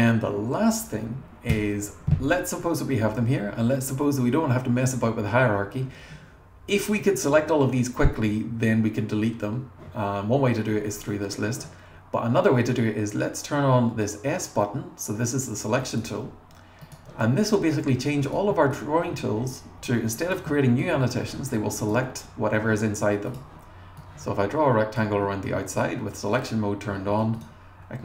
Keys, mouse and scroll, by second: 1.5 BackSpace, 2.2 click, 3.1-3.6 scroll down 1, 3.6-4.2 scroll up 1, 4.6-5.1 scroll up 1, 15.8 click, 16.8 click, 17.5 click, 18.8-20.4 drag, 20.8-22.0 drag, 23.3 click, 24.0-25.1 drag, 27.3 click.